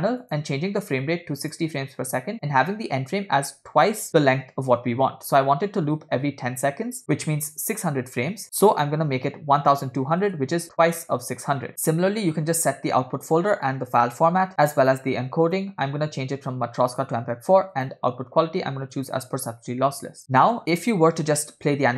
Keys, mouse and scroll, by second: 0.3-1.7 drag, 2.4-10.3 drag, 9.7 0, 11.7 click, 11.7 scroll down 2, 11.9 /, 13.3-14.1 drag, 14.6 click, 14.9 scroll down 1, 15.5-17.1 drag, 17.8-19.2 drag, 20.2 scroll up 5, 21.7 space.